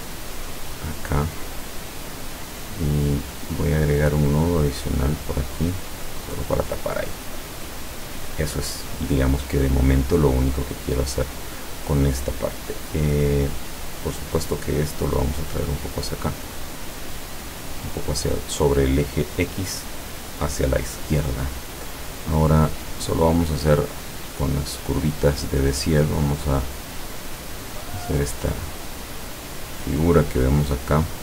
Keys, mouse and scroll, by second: 0.8-2.7 drag, 4.6 click, 5.3-6.6 drag, 14.0 click, 14.6-18.2 drag, 22.9 click, 26.1 click, 26.9 click, 28.6-29.8 drag.